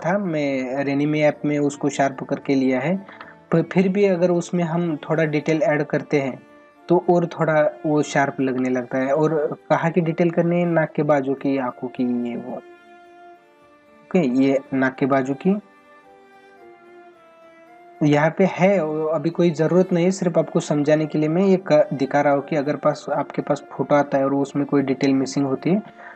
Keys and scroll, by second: 3.1 ctrl+alt+z, 8.5 ctrl+alt+z.